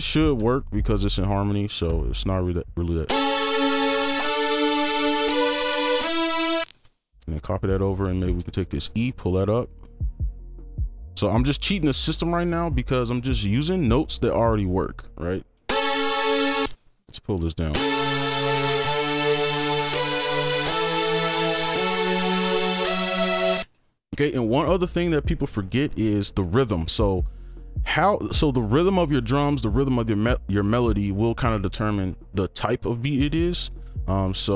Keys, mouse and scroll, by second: 1.9 right click, 2.4 alt+click, 3.0 space, 4.5 right click, 6.4 ctrl+click, 6.6 space, 7.1 shift+click, 7.8 shift+right click, 7.8 shift+click, 8.2 ctrl+click, 8.4 shift+click, 9.0 shift+click, 9.6 ctrl+shift+Up, 9.6 right click, 14.2 ctrl+click, 14.6 right click, 16.1 space, 16.2 ctrl+click, 16.6 space, 16.9 ctrl+Down, 17.9 right click, 17.9 space, 19.8-21.4 scroll up 1, 21.4-22.0 scroll down 1, 22.0 right click, 22.3-23.6 scroll up 1, 26.1-27.2 scroll down 1, 27.9 double click.